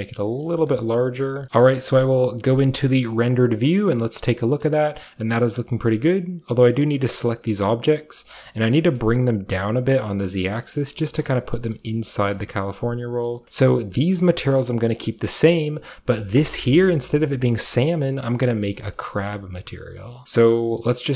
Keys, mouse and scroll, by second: 0.0-1.4 typing, 0.4 click, 0.8 click, 1.2 Tab, 1.4-2.1 scroll up 1, 1.7-4.2 middle drag, 2.5 z, 3.0 z, 3.0-4.2 z, 4.2-4.6 scroll down 1, 4.6-5.1 middle drag, 5.2-6.1 scroll up 1, 5.3-5.9 middle drag, 6.1-10.5 middle drag, 6.8 typing, 8.5 typing, 10.5 click, 10.5-13.3 typing, 11.7 click, 13.2 click, 13.4-16.4 scroll up 1, 16.4 scroll up 1, 16.9-18.9 middle drag, 18.1 KP_7, 19.1-21.1 shift+middle drag, 19.1-20.2 shift+scroll up 1, 20.2-21.1 scroll down 1, 20.2 a.